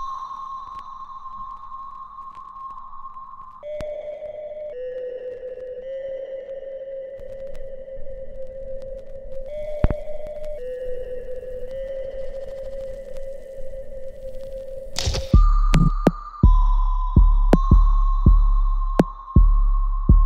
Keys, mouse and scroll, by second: 0.5 click, 1.3-5.2 right drag, 5.2 alt+right click, 5.8-9.2 alt+middle drag, 9.2 ctrl+d, 10.1 click, 10.8 e, 11.4 click, 15.8 click, 16.1 alt+click, 16.7 alt+middle click, 17.4 alt+click, 18.1 alt+middle click, 18.6 alt+right click, 19.8 click.